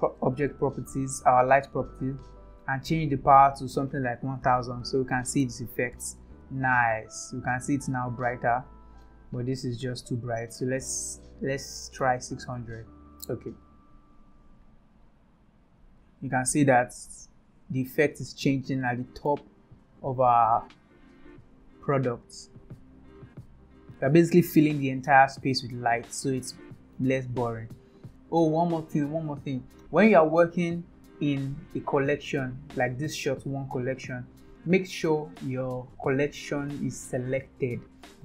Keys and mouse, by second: 0.6 click, 2.9-6.2 drag, 4.4 KP_0, 10.0-13.8 drag, 12.4 KP_0, 16.1 click, 17.2 click, 18.9-19.3 shift+middle drag, 20.9 click, 21.4 click, 22.2 click, 23.5-24.4 drag, 24.7-25.7 shift+middle drag, 26.3 shift+middle click, 33.5 click, 37.5 click.